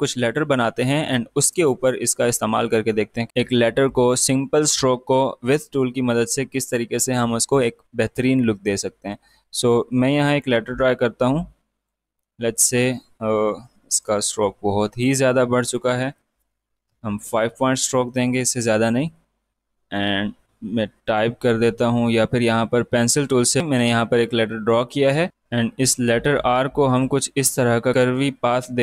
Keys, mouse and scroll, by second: 10.0-13.8 drag, 17.0 Tab, 18.0 click, 18.6 space, 18.6 click, 19.5 space, 21.0-24.6 drag, 25.3-28.8 drag.